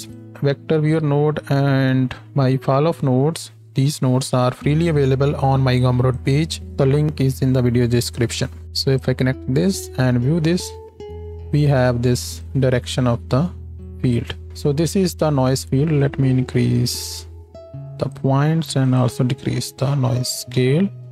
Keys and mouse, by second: 0.8 shift+a, 8.3 click, 9.8-12.5 ctrl+shift+drag, 21.0 shift+KP_0.